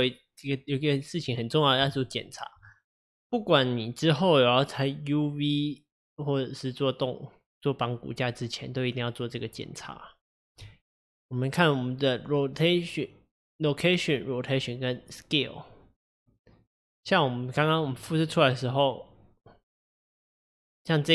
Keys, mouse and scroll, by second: 2.1-5.1 shift+middle drag, 10.7 click, 18.0 click, 19.8 click.